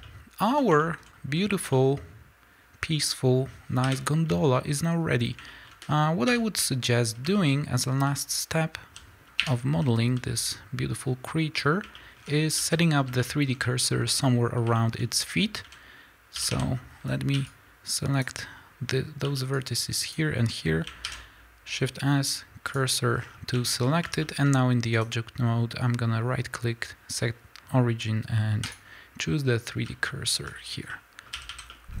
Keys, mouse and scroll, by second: 3.8 KP_1, 4.5 shift+middle click, 4.9-5.4 scroll up 1, 5.4 shift+middle click, 6.4 Tab, 7.3 shift+middle click, 7.4 scroll up 1, 8.0 z, 9.5-14.9 middle drag, 9.5 1, 9.8 z, 12.2-12.5 scroll up 3, 12.5 a, 13.0 scroll up 2, 14.4-15.5 scroll up 4, 15.5 a, 17.3 b, 20.9 shift+s, 23.1 scroll down 1, 23.7 Tab, 23.7 scroll down 1, 24.1 shift+middle click, 24.9-30.8 right drag, 29.8 z, 30.8-32.0 middle drag, 31.3 a.